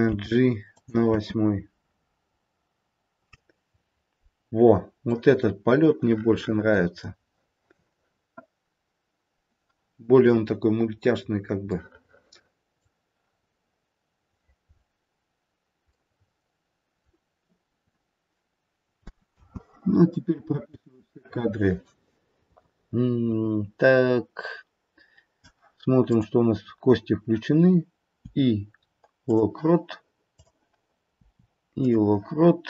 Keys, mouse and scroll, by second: 0.1 g, 1.0 space, 2.3-4.0 scroll up 1, 6.3 middle click, 10.4-11.2 scroll down 4, 11.2-11.6 scroll up 1, 11.8 middle click, 13.2-14.8 scroll up 1, 14.8-15.4 scroll up 2, 15.4-15.8 scroll down 1, 15.8 middle click, 16.0 middle click, 19.4 space, 20.7 click, 26.0 click, 28.2 i, 30.4 click, 31.1 i.